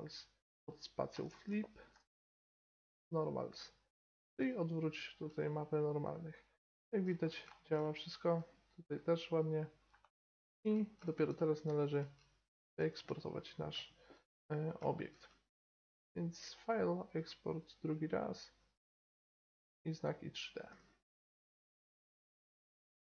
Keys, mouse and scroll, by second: 5.6 middle click, 7.7 middle click, 8.1 middle click, 8.4 middle click, 8.5 middle click, 9.2 middle click, 9.5 middle click, 9.7-12.9 middle drag, 12.0 Tab, 16.4-18.3 drag, 20.8-22.5 drag.